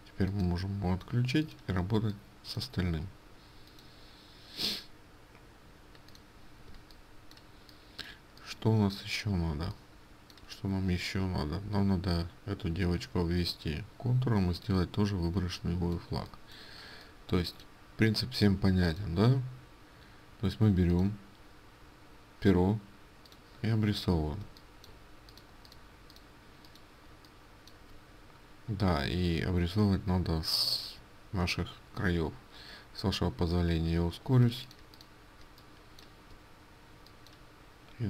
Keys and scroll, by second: 34.5 ctrl+space.